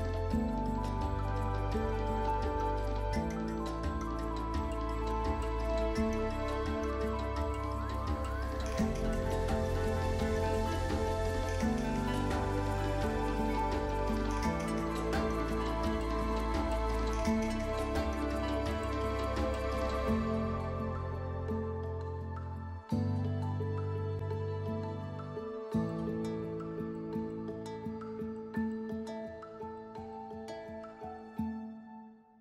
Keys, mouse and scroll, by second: 0.1-0.7 scroll up 1, 0.7-1.1 scroll down 1, 1.1 scroll up 1, 2.4 click, 4.0 scroll down 1, 5.3 scroll up 1, 5.6 scroll down 1, 5.8-9.9 scroll up 1, 10.0-12.8 scroll down 1, 12.8 scroll up 1, 23.6 scroll down 1, 25.8 scroll up 1.